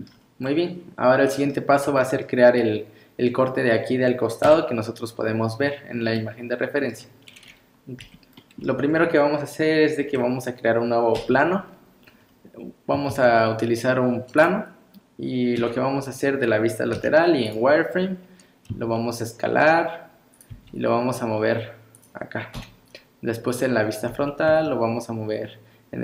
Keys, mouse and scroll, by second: 8.0 n, 8.4 middle click, 8.9 scroll up 3, 11.1 KP_1, 12.2 scroll down 2, 13.1 shift+a, 15.6 KP_3, 16.9 z, 18.7 s, 20.5 g, 22.5 KP_1, 23.6 scroll up 2, 24.1 g.